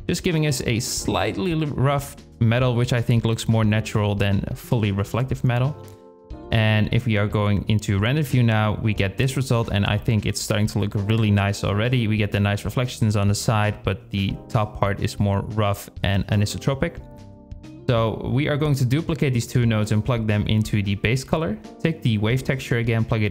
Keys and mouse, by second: 1.6 click, 4.3 KP_Divide, 4.7 z, 7.6-8.0 middle drag, 8.6 shift+middle click, 15.0 drag, 15.9 shift+d, 18.8-19.5 drag, 20.4 shift+click, 21.1-22.3 drag.